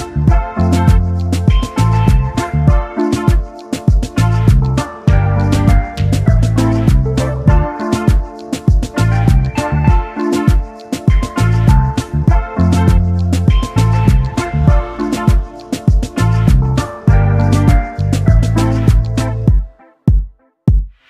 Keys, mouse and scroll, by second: 0.5 ctrl+z, 3.5 right click, 4.4 ctrl+z, 6.6 ctrl+z, 7.5 ctrl+z, 7.5 right click, 9.8 ctrl+z, 16.6 right click, 18.2 right click, 19.4 ctrl+z, 19.7 right click.